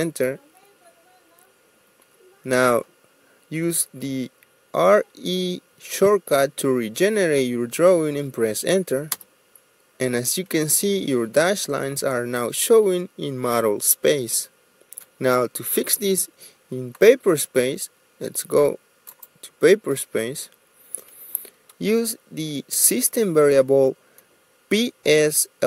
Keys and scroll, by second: 0.8 Return, 4.7 typing, 9.5 Return.